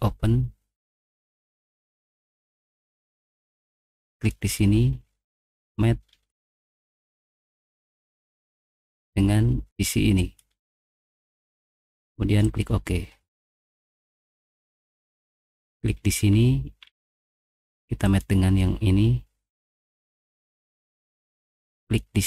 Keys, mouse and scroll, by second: 1.0 click, 1.8 middle click, 2.3 middle click, 2.7 middle click, 4.2 right click, 5.6 click, 6.1 middle click, 6.4 middle click, 7.4 middle click, 7.7 middle click, 8.1 middle click, 8.4 middle click, 8.8 middle click, 12.2 click, 13.4 middle click, 13.6 middle click, 13.6-14.0 scroll down 2, 13.8 middle click, 14.2 click, 14.7 middle click, 15.0 middle click, 16.0-17.1 scroll down 2, 16.8 middle click, 18.0 click, 21.8 click.